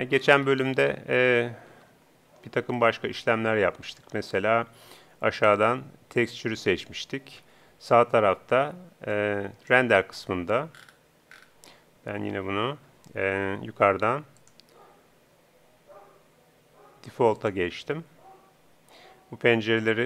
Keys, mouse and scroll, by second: 0.5 middle click, 1.7 ctrl+Up, 1.7 middle click, 2.8-4.6 middle drag, 5.3-7.1 drag, 7.5 n, 9.1-10.6 drag, 10.8 middle click, 12.6 ctrl+Up, 16.8 middle click.